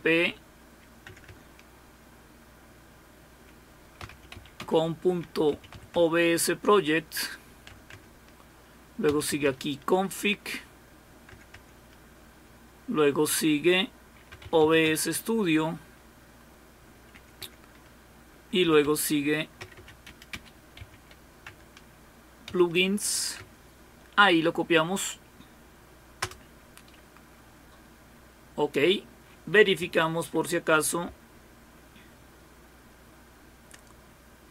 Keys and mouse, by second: 1.0-1.7 typing, 4.6-6.2 typing, 7.7 Tab, 7.9 Tab, 8.8-11.8 typing, 14.6-15.3 typing, 17.1 Tab, 17.4 Tab, 18.6-20.8 typing, 21.4 Tab, 22.2-23.0 typing, 23.4 Tab, 31.7-33.3 Left, 33.4-34.5 Left.